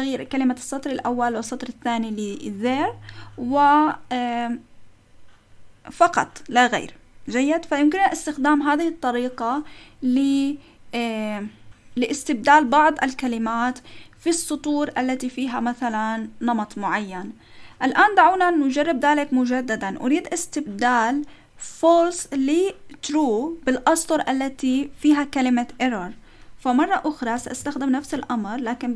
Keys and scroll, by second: 27.4 shift+;, 27.8 Up, 28.1 Left, 28.6 Left.